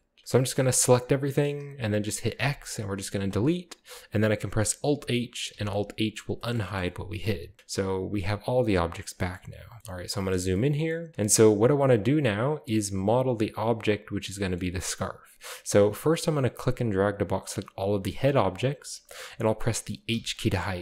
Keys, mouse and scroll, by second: 0.2-0.9 middle drag, 0.2-0.9 scroll down 2, 0.7 a, 0.8 a, 2.3 x, 3.3 click, 5.5 alt+h, 6.4-7.5 shift+middle drag, 7.6-8.8 drag, 9.0-10.3 shift+middle drag, 9.4-10.6 scroll up 1, 10.1 a, 10.6-11.4 middle drag, 10.6 scroll down 1, 11.1-11.5 scroll up 1, 11.5 scroll down 1, 12.0-12.4 scroll down 1, 14.3-15.8 middle drag, 14.8-15.8 scroll up 1, 15.8-18.3 drag, 18.9 click, 20.1 h.